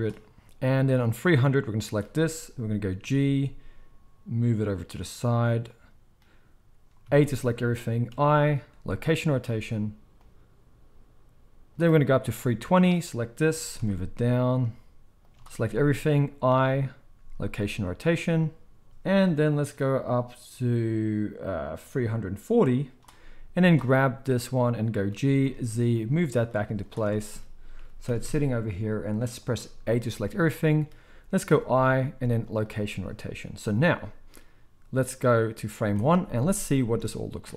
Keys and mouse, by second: 0.8-1.1 middle drag, 1.1-5.8 drag, 3.0 g, 5.8-10.2 middle drag, 7.0 a, 8.1 i, 10.2-15.3 drag, 13.5 g, 15.3-16.5 middle drag, 15.6 a, 16.5 i, 19.1-21.6 middle drag, 21.6-23.6 drag, 23.6-35.2 middle drag, 25.1 g, 26.6 z, 27.8 g, 30.0 a, 35.2-37.5 drag, 36.9 alt+a, 37.4 space.